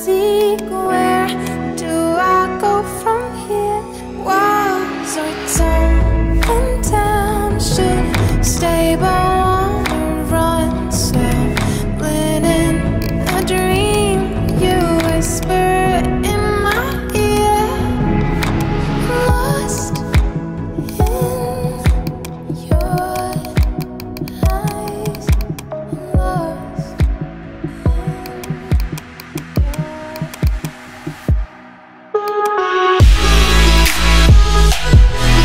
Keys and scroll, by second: 9.5 ].